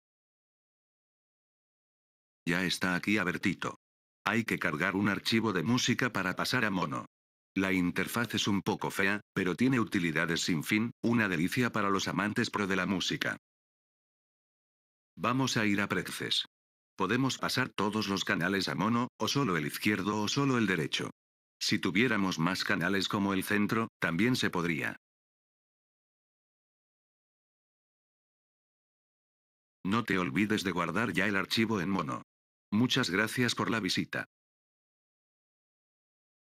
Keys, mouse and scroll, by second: 2.0 click, 5.4 click, 6.9 click, 9.3 click, 14.8 right click, 16.7 click, 26.6 click, 29.4-30.4 right drag, 32.4 click.